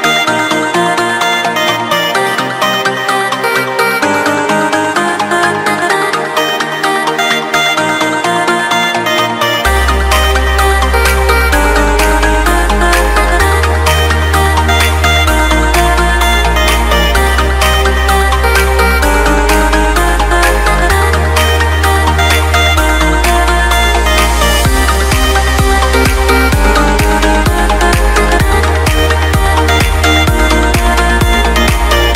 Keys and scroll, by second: 2.0 Escape, 7.1 Return, 9.0 Return, 14.4 Return, 27.4 Return, 28.2 Escape.